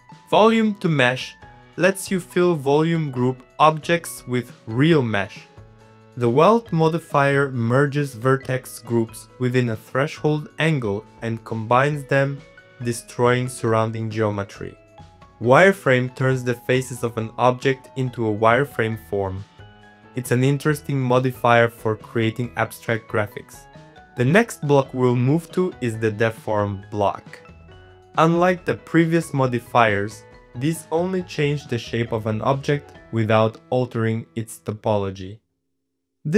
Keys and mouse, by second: 0.4 middle click, 0.9 middle click, 2.2 click, 3.4-4.6 drag, 4.6 click, 5.2 click, 6.1 middle click, 6.5-8.0 drag, 8.0 middle click, 9.1 shift+middle click, 9.9 Tab, 10.0 click, 10.1 middle click, 10.1 Tab, 10.2 click, 10.9-11.9 drag, 11.9 shift+middle click, 12.2 shift+middle click, 13.4 shift+click, 13.6 middle click, 13.8 middle click, 14.1-15.2 shift+drag, 15.3 middle click, 17.1-22.4 drag, 22.4 middle click, 23.1 click, 24.0 click, 24.9 click, 25.3 click, 26.6 shift+click, 28.3 shift+click, 30.1 shift+click, 30.3 middle click, 30.6 middle click, 30.8 middle click, 31.3-32.4 drag, 32.7 click, 33.7 click, 33.8 click, 34.2 click, 34.9 click, 35.9 click.